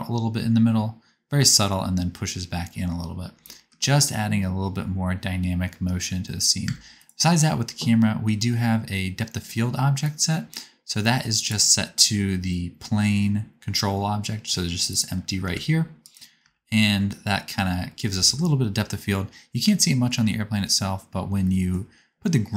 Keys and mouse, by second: 4.5-7.0 drag, 6.6 space, 7.0-9.9 middle drag, 9.9-11.4 drag, 15.3 g, 16.3 space, 19.5-22.5 shift+drag.